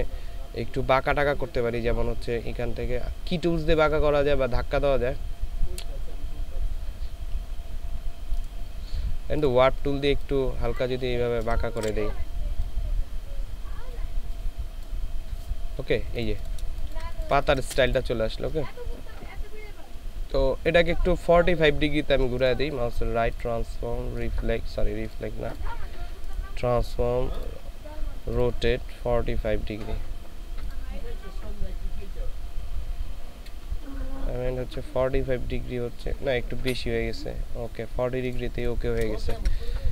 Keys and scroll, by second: 11.8 ctrl+z, 16.8 ctrl+space, 39.3 ctrl+space.